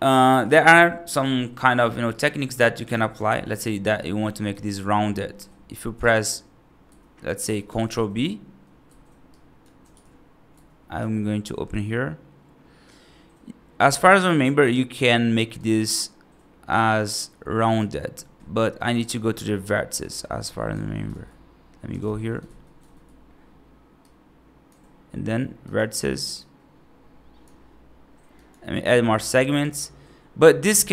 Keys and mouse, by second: 0.0 middle click, 0.9 right click, 2.0 right click, 2.7 right click, 3.8 right click, 5.2 middle click, 5.8 b, 7.5 ctrl+b, 9.1 click, 9.8 ctrl+b, 10.8 t, 15.4 click, 16.6-17.9 drag, 18.9 click, 19.9 click, 21.0 ctrl+z, 21.9 ctrl+shift+z, 22.7 ctrl+z, 23.9 click, 26.4-27.4 drag, 28.3 click, 29.6 click, 30.7 ctrl+z.